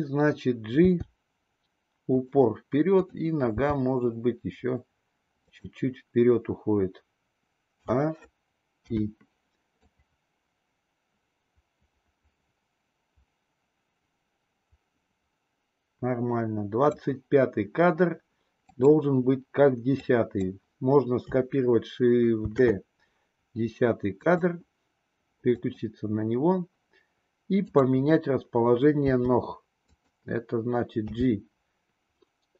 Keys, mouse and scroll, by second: 0.8 g, 3.0 click, 3.6 g, 7.7 a, 8.8 i, 9.8-17.1 drag, 18.7 click, 19.8-20.3 drag, 22.4 shift+d, 25.4 click, 27.6 click, 29.0 r, 31.0 g.